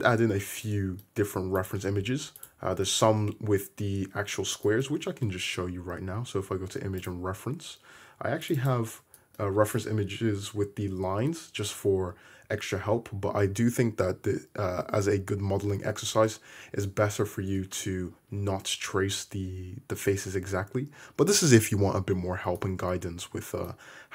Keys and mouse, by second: 0.9-1.6 middle drag, 1.6 click, 1.7-2.4 middle drag, 2.4 click, 2.5-4.9 middle drag, 4.9 shift+a, 5.0-8.6 middle drag, 16.4-17.0 middle drag.